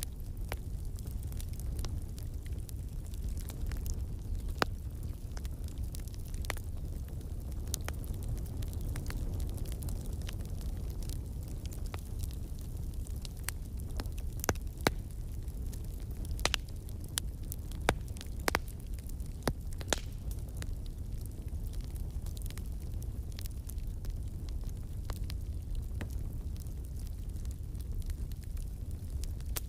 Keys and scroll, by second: 2.9-4.2 scroll, 3.2 space, 3.2 space, 3.3 space.